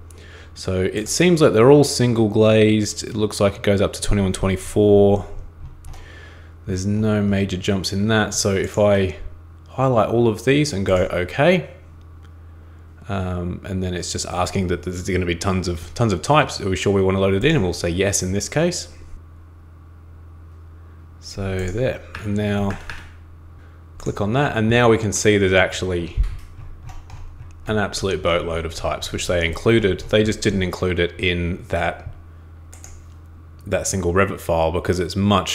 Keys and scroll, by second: 22.1 super+Escape, 22.7 super+Escape, 22.9 super+Escape.